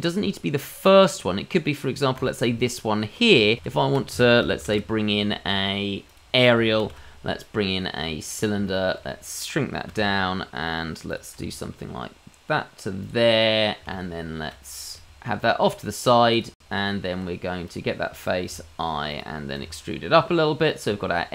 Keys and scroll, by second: 3.6 shift+a, 4.7 shift+s, 6.8 shift+a, 11.3 s, 11.3 g, 15.6 g, 16.7 Tab, 18.5 i, 19.5 e, 20.8 Tab.